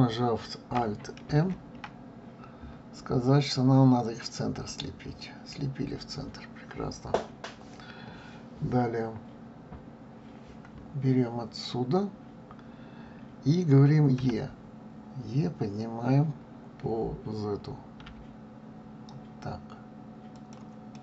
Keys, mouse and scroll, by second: 1.3 alt+m, 14.2 e, 20.9-21.0 middle drag.